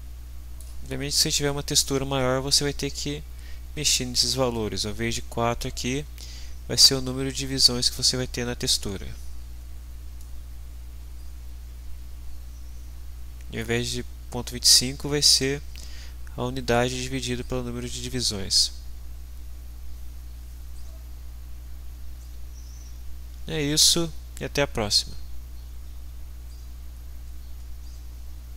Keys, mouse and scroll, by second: 10.1-13.8 middle drag.